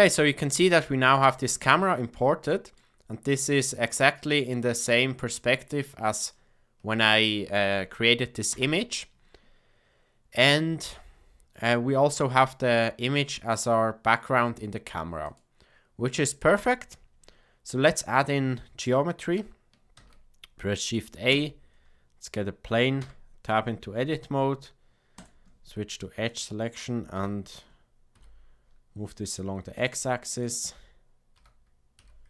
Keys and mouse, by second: 0.4-0.8 middle drag, 1.3 shift+middle drag, 2.1-2.7 middle drag, 4.3-5.8 middle drag, 6.3-7.1 shift+middle drag, 8.5 KP_0, 15.3 click, 16.5 click, 19.9 shift+a, 23.0 Tab, 25.1 click, 27.1 g, 31.3 g.